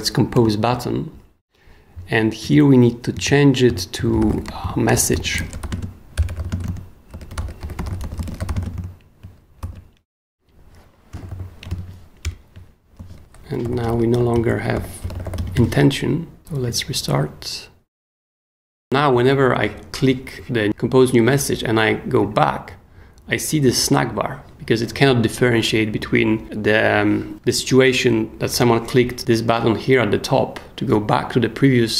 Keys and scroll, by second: 0.3 Return, 3.2 super+Escape, 3.4-9.0 typing, 9.6 super+s, 11.1 b, 11.6 super+b, 11.7 super+., 12.2 super+Return, 13.0 super+s, 13.4-15.9 typing.